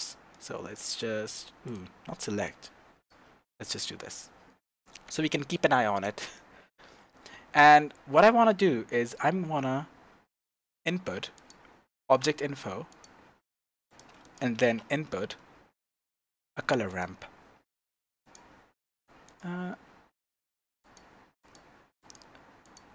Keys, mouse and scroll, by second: 0.3 click, 1.2 click, 1.6 click, 2.4-3.5 drag, 3.5-5.9 shift+middle drag, 5.9 click, 6.3-14.0 shift+middle drag, 7.3 shift+a, 14.2 click, 14.5 shift+a, 18.3 click, 19.2 click, 22.0-22.9 drag.